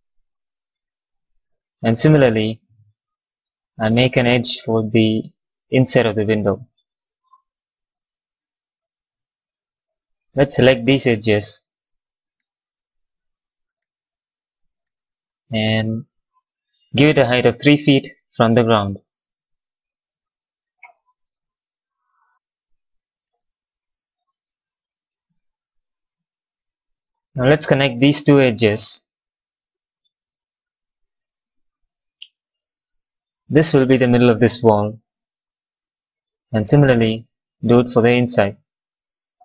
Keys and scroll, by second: 11.8 w, 12.2 space, 21.2 x, 22.1 space.